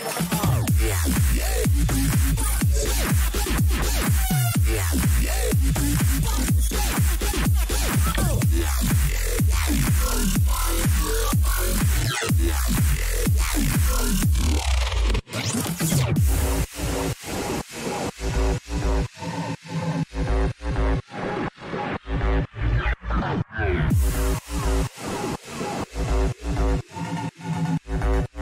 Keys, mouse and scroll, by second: 9.4-11.1 middle drag, 9.8 a, 11.7 a, 12.0 a, 12.4 Tab, 19.4 middle click, 21.0 Tab, 22.5 ctrl+z, 23.1 ctrl+z, 23.6 ctrl+z, 24.0 ctrl+z, 24.4 ctrl+z, 25.6 Tab, 26.0-27.3 middle drag.